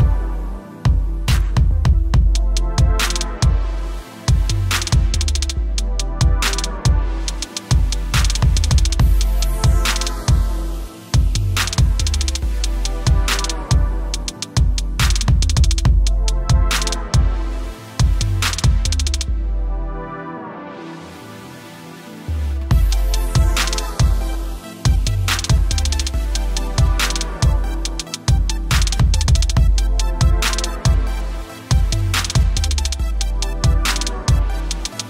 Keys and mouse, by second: 1.0 t, 3.0 F8, 5.3 click, 5.6 ctrl+t, 6.1 alt+click, 7.7 Return, 8.0 click, 10.5 click, 11.6 right click, 11.8 click, 12.9 click, 13.3 click, 14.5 click, 15.1 click, 17.8 click, 19.3 g, 21.4 click, 25.2 a, 25.8 click, 32.4 right click, 33.7 click.